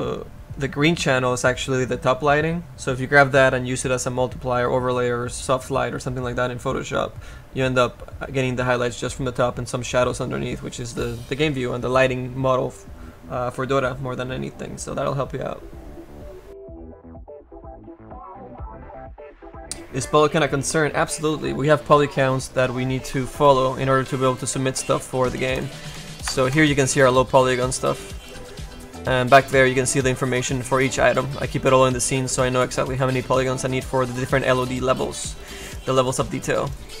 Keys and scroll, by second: 30.6 space, 33.5 space.